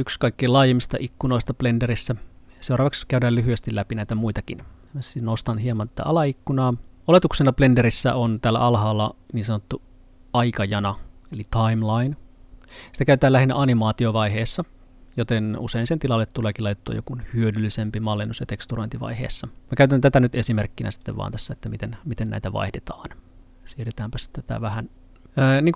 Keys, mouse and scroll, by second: 5.7 Pause, 5.7 click, 21.0 click.